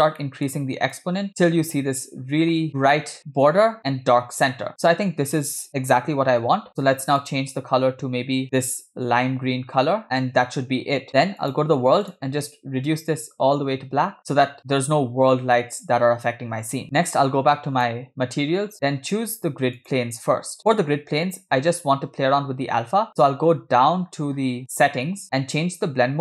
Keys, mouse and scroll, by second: 0.2 middle click, 1.0-2.1 drag, 2.6-3.1 scroll up 5, 4.5-5.5 scroll down 4, 6.7 middle click, 7.4 click, 10.2-10.6 scroll down 3, 11.4 click, 12.1 click, 17.6 click, 19.8 click, 23.2-26.2 scroll down 11.